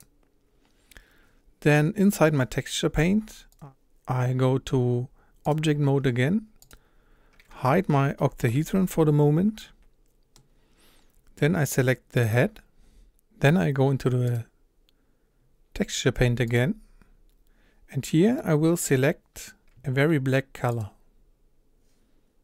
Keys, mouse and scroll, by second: 0.0-5.5 drag, 6.3-6.7 scroll down 2, 6.7 click, 7.0-8.5 scroll up 2, 8.5 h, 9.6-11.2 middle drag, 11.2-12.2 scroll up 2, 12.2 click, 16.8-18.4 drag, 18.4-22.4 middle drag.